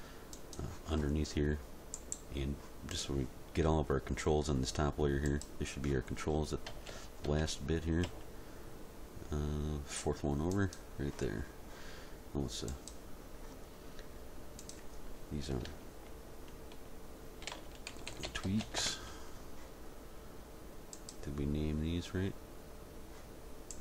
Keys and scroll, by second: 6.7 a, 8.0 m, 17.5-18.6 typing, 18.8 Return.